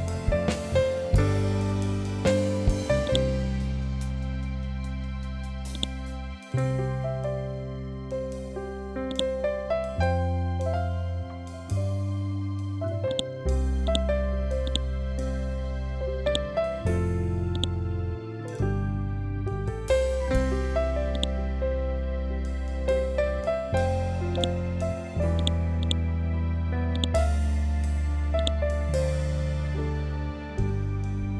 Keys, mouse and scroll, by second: 0.2 scroll up 1, 2.5-3.9 drag, 3.9 scroll up 1, 5.2-7.0 drag, 7.0 ctrl+Home, 8.6-11.4 drag, 11.7 scroll up 1, 12.6-20.6 drag, 20.6-22.5 drag.